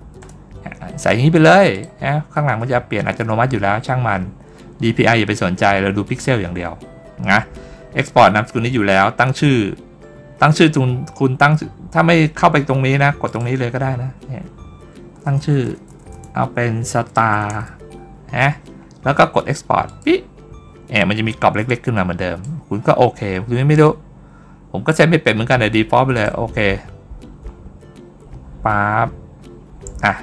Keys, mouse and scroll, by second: 1.6 click, 13.1 click, 19.7 click, 21.5 click, 26.0 click.